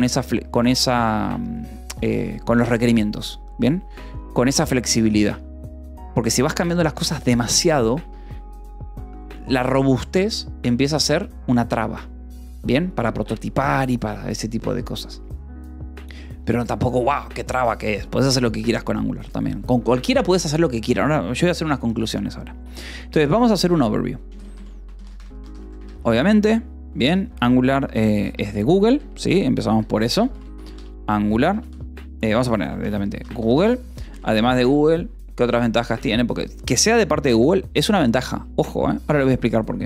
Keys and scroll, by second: 15.9 o, 23.8-25.7 typing, 27.1-34.0 typing.